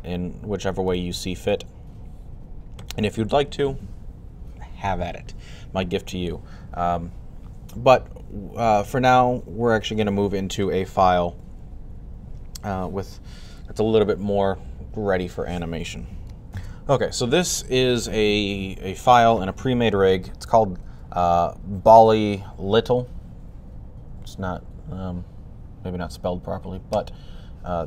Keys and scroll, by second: 1.4 typing, 16.4 super+s, 16.4 typing, 18.2-19.0 typing.